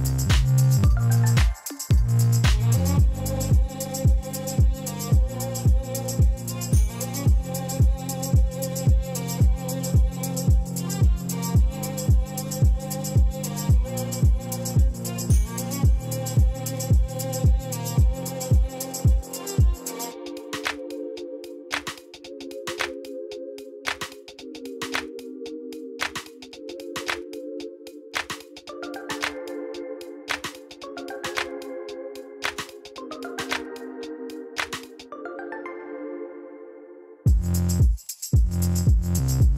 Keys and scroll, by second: 26.1 ., 26.4 9, 26.6 Return, 29.1 shift+a, 31.6 r, 31.8 y, 32.0 9, 32.4 Return, 35.6 g, 36.2 x, 37.5 g, 37.8 z, 38.9 Tab.